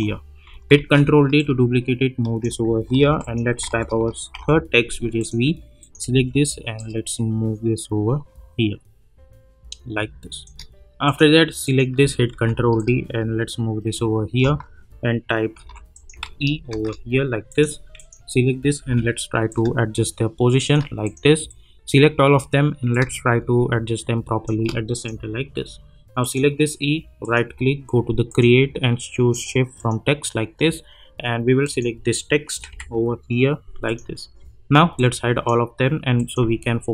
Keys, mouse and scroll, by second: 0.8 ctrl+d, 1.4-3.0 drag, 3.0 ctrl+t, 3.2 click, 3.7 ctrl+a, 4.3 shift+v, 5.2 click, 6.1 v, 7.1-10.5 shift+drag, 12.3 ctrl+d, 13.1-14.6 shift+drag, 15.6 ctrl+t, 15.9 click, 16.2 ctrl+a, 16.7 shift+e, 17.5 click, 18.8 v, 19.8 shift+click, 27.2 right click, 28.3 click, 33.8 click.